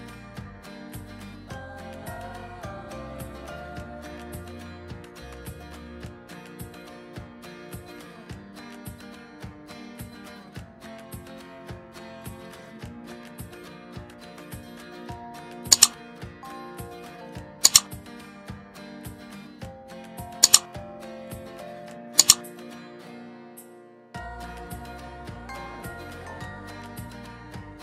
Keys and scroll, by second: 2.4 ctrl+z.